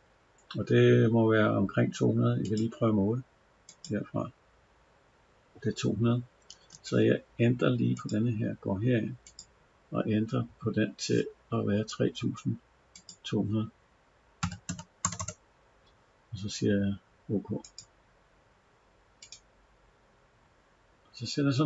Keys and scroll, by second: 6.4 Escape.